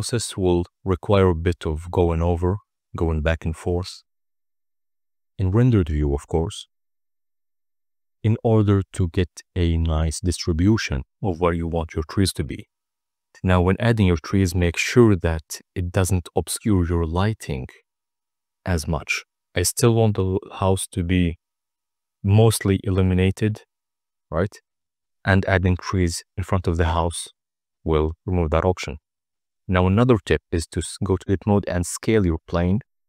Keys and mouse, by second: 0.0 click, 0.3 click, 0.7 click, 3.5 click, 3.9 KP_0, 4.8 middle drag, 8.2 n, 9.0 click, 9.7 KP_0, 10.9 click, 11.6 middle click, 12.0 click, 13.9 ctrl+z, 14.2 click, 14.4 KP_0, 15.1 middle click, 15.7 KP_0, 16.7 click, 17.5 click, 17.8 click, 18.3 ctrl+z, 18.6 click, 20.1 middle click, 20.7 z, 21.1 click, 21.6 middle drag, 21.8 click, 24.5 click, 25.0 click, 26.0 Tab, 26.7 s, 27.0 0, 27.2 ., 27.3 1, 27.7 Return, 29.4 Tab.